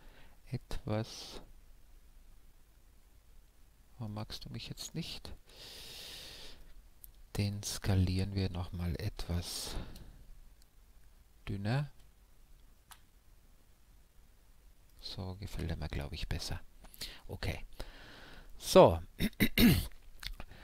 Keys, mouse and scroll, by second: 0.8-2.5 right drag, 1.3-4.5 middle drag, 4.5-4.8 scroll up 1, 4.7 s, 12.2 a, 12.6 Tab, 13.2-17.0 middle drag, 17.5-20.6 middle drag.